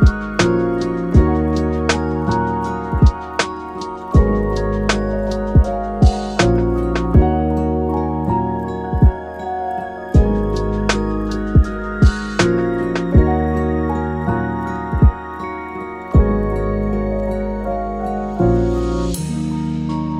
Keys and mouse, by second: 0.3 shift+d, 1.1 shift+Tab, 1.6 g, 3.6 middle drag, 4.9-5.3 middle drag, 6.0 shift+click, 6.4 shift+middle click, 6.7 middle click, 7.2 shift+click, 7.4 shift+middle click, 8.2 shift+click, 8.8 middle drag, 9.5 KP_7, 10.4 shift+middle click, 10.6 shift+d, 13.1-13.9 middle drag, 14.1 a, 14.2 a, 14.4-15.0 middle drag, 19.2 ctrl+a, 20.0 middle click.